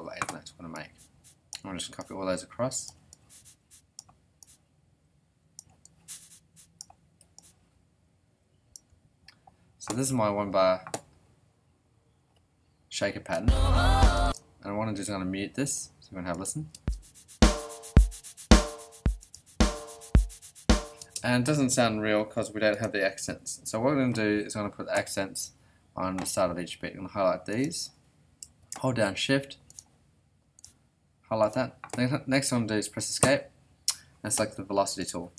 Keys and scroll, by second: 13.3 space, 16.7 space, 21.0 space, 33.2 Escape.